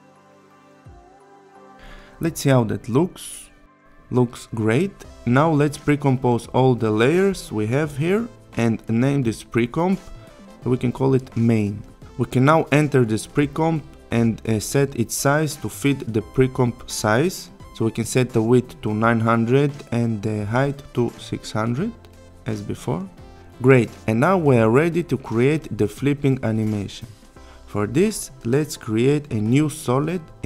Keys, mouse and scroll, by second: 1.5 Return, 2.7-4.1 click, 6.1 right click, 6.9 click, 8.1-9.1 typing, 9.7 click, 12.8 click, 15.8 ctrl+k, 18.3 click, 24.3 click, 28.4 right click.